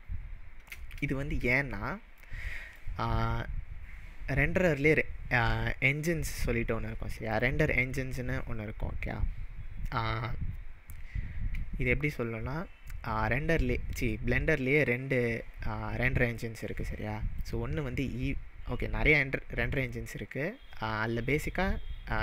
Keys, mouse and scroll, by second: 1.5-2.8 middle drag, 7.3 click, 17.4-20.4 drag.